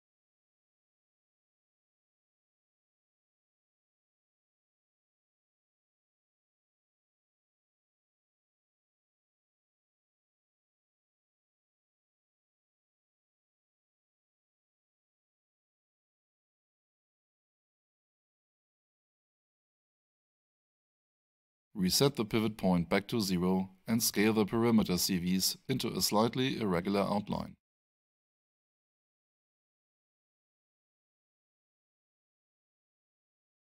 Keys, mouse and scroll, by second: 5.7 alt+shift+click, 6.0 alt+shift+right click, 7.4 alt+shift+middle click, 7.8 alt+shift+click, 9.3 alt+shift+right click, 13.6 F5, 15.2 alt+shift+middle click, 18.3 click, 20.1 alt+shift+right click, 21.0 alt+shift+middle click, 24.5 alt+shift+click, 24.7 alt+shift+right click, 25.5 alt+shift+middle click, 26.7 alt+shift+right click, 27.7 alt+shift+middle click, 27.9-28.7 alt+shift+scroll up 3, 28.7 click.